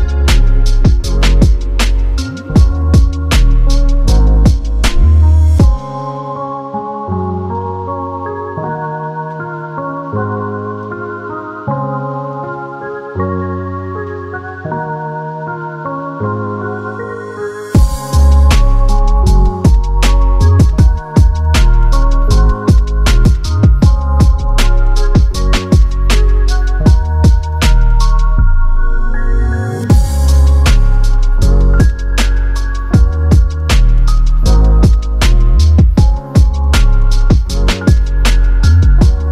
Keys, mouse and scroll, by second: 0.0 space, 0.2 scroll up 1, 0.3 scroll down 4, 0.4 middle click, 0.8-1.1 scroll up 5, 1.1 middle click, 1.6 space, 2.1 shift+click, 2.3 scroll down 5, 2.4 middle click, 2.9 s, 4.4 middle click, 6.4 middle click, 7.3-8.0 scroll up 3, 8.3 middle click, 8.5 scroll down 11, 8.7 scroll up 4, 8.8 middle click, 9.0 space, 9.3 click, 10.5-11.2 scroll up 2, 11.4 middle click, 11.7-12.0 scroll up 13, 12.0 middle click, 12.3 scroll down 12, 12.5 space, 12.7 double click, 13.2 Delete, 13.3 middle click, 13.5-14.1 scroll down 6, 14.1 scroll down 1, 14.1 middle click, 14.5 middle click, 14.7-15.2 scroll up 10, 15.2 middle click, 19.3 space, 19.6 middle click, 20.0 middle click, 20.4 scroll up 4, 20.5 scroll down 4, 20.7 middle click, 21.6-23.2 typing, 21.6 middle click, 22.6-23.2 scroll down 4, 24.7 Return, 25.2 typing, 25.3 Return, 25.7 middle click, 26.3 shift+click, 26.7 middle click, 26.7 scroll down 1, 27.9 space, 28.1 middle click, 28.7 middle click, 29.9 scroll up 4, 30.1 middle click, 30.8 scroll down 7, 31.1 middle click, 31.4 middle click, 31.6 scroll down 1, 31.7 middle click, 32.6 middle click, 33.0 scroll up 4, 33.2 middle click, 33.5-33.8 scroll down 3, 33.8 space, 34.2 shift+click, 34.4 middle click, 34.8 shift+click, 34.9 shift+click, 35.3 typing, 36.3-37.1 typing, 37.0 middle click, 37.7 scroll up 1, 37.9 middle click, 38.4 space, 38.7 middle click.